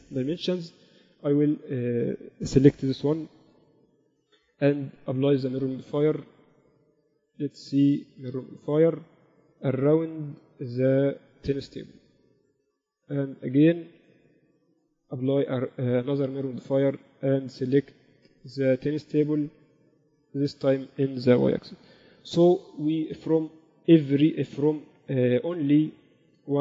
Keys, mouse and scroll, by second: 3.8 n, 4.3 n, 4.8 ctrl+Up, 6.3-8.8 drag, 10.8-12.7 drag, 10.8 middle click, 10.8 right click, 15.6-17.6 drag, 17.9-19.6 drag, 20.7-22.4 drag, 22.3 KP_6, 22.7 KP_6, 26.2 middle click.